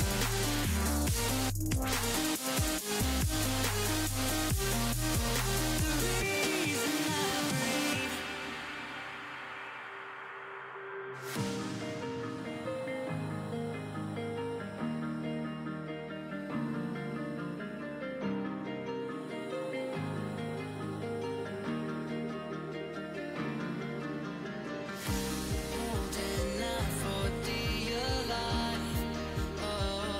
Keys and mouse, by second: 4.8-8.7 drag, 5.4 ctrl+z, 7.5 g, 9.7 z, 10.1 z, 10.3 Tab, 11.9 KP_1, 13.6 Tab, 16.0-18.2 typing, 19.6 h, 21.3 ctrl+z, 22.4 g, 27.3 ctrl+r.